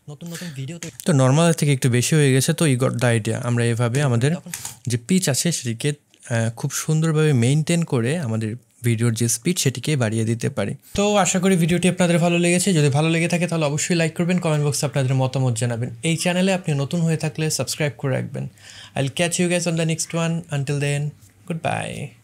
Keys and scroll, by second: 0.8 space, 3.9 space, 4.5 space.